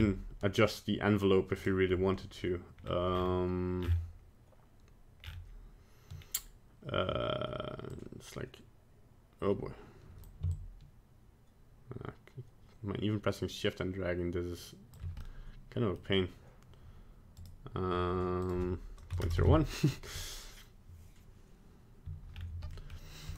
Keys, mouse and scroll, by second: 1.5 click, 2.8-3.6 scroll up 8, 3.8-5.2 scroll down 8, 5.2-6.2 scroll down 5, 6.2-7.1 scroll down 1, 7.9 click, 10.5 shift+click, 15.2 middle click, 17.4 right click, 18.4 click, 22.3-22.8 scroll down 2, 22.8 middle click.